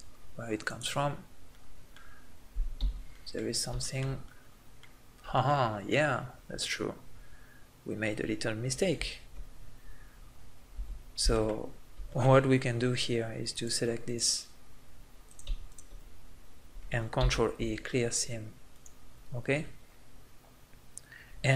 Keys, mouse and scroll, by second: 0.7 click, 0.7 right click, 1.5 middle click, 2.7 z, 4.0 right click, 8.3-10.8 middle drag, 10.8 z, 11.1 middle click, 11.8-13.5 middle drag, 14.7 middle click, 15.3 right click, 15.8 middle click, 17.2 ctrl+e, 19.2 middle click, 19.3-20.3 middle drag.